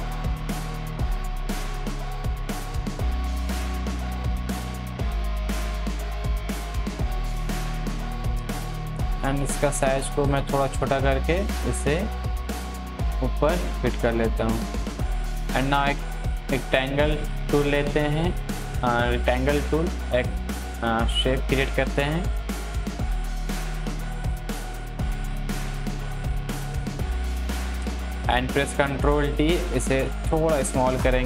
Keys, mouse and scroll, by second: 8.7 ctrl+t, 9.4-13.2 drag, 13.2 Left, 13.9-22.2 drag, 22.2-23.1 scroll down 1, 23.1-28.7 drag, 28.7 ctrl+t, 29.6-31.2 drag.